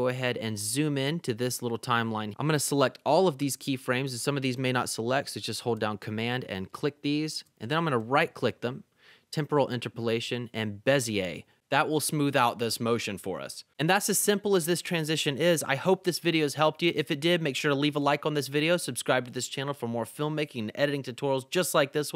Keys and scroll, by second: 0.6 =.